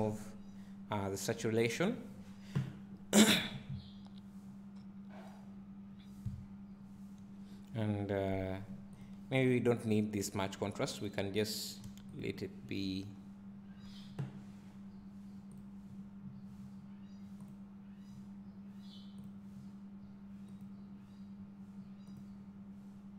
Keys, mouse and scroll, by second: 3.1-3.8 scroll down 2, 3.8 `, 6.7 scroll up 1, 13.0 click, 16.5 click, 18.3-23.1 drag.